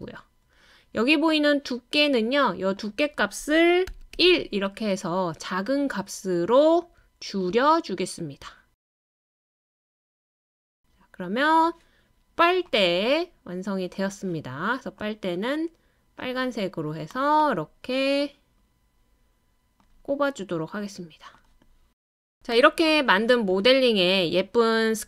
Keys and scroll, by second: 3.9 1, 4.1 Return.